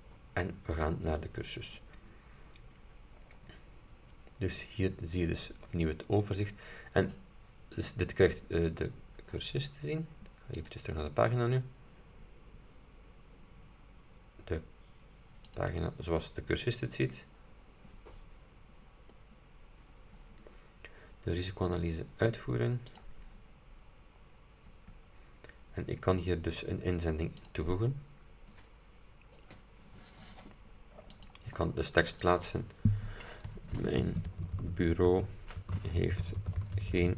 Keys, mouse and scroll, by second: 2.6 scroll up 2, 3.7-4.1 scroll down 2, 4.7-5.1 scroll down 2, 6.0-6.3 scroll up 2, 6.7 scroll up 2, 7.8 scroll down 2, 8.8-9.2 scroll up 2, 10.7 click, 15.6 click, 18.8-20.1 scroll down 6, 23.0 click, 25.7-26.6 scroll down 4, 27.5 click, 31.3 click, 32.4 click, 33.6-37.1 typing.